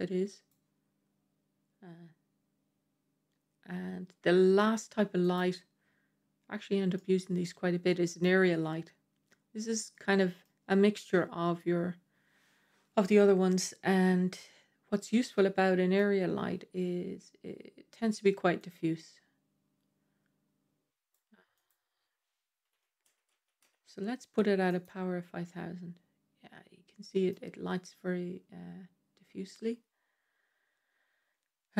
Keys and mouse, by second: 5.1 click, 6.8-8.1 middle drag, 9.8-10.3 middle drag, 15.2-15.8 middle drag, 18.4-21.0 drag, 21.6-24.6 drag, 23.2 KP_0, 25.3-27.2 middle drag.